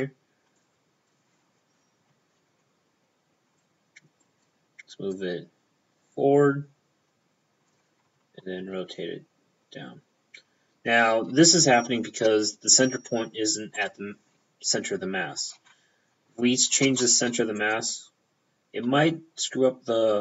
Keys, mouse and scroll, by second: 0.0 p, 0.6 click, 1.1 p, 3.7 click, 4.3 click, 5.2 click, 8.5 r, 8.7 p, 13.8 right click, 13.9 p, 16.4 alt+shift+p, 16.9 ctrl+alt+shift+c, 17.4 p, 17.6 click.